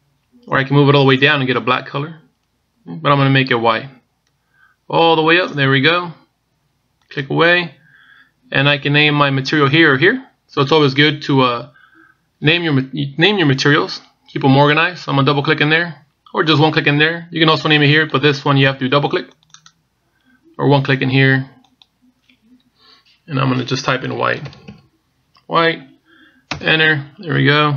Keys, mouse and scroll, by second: 0.5 click, 16.4 click, 20.2 click, 20.3 click, 22.4 click.